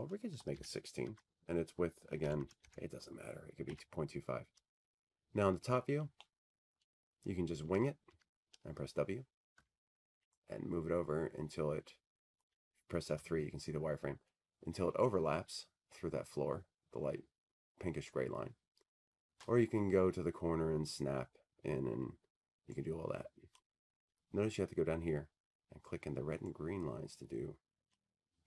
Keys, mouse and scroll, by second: 1.4 8, 1.6 Tab, 2.6 Tab, 2.7 Tab, 3.0 Tab, 3.7 typing, 5.7-8.7 typing, 9.2 Tab, 12.5-13.0 scroll, 13.0-14.2 scroll, 15.1 w, 17.9 click, 18.6 F3, 19.1 scroll, 19.5 middle click, 20.4 middle click, 20.5 middle click, 24.9 click, 25.2-26.5 scroll, 26.5-27.3 scroll, 27.3 scroll.